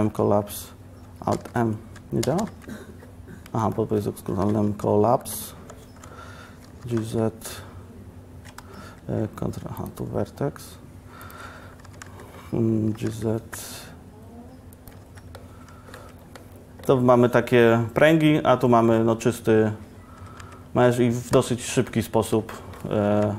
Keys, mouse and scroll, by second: 4.5 alt+m, 5.9 1, 6.9 g, 11.9 g, 12.1 z, 13.0 g, 15.1 z, 16.1 Tab, 19.9 Tab, 20.3 Tab, 20.5 Tab.